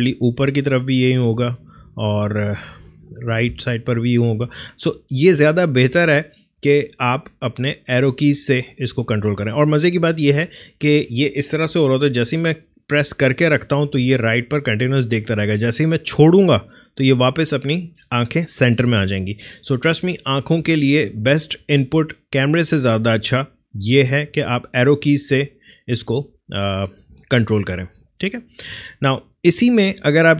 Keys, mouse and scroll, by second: 0.0 Up, 3.0 Right, 3.4 Down, 3.7 Up, 5.8 Down, 7.6 Left, 12.8 Right, 20.1 Right, 21.0 Left, 22.3 Up, 23.5 Down, 24.5 Up, 26.6 Right, 28.0 Left.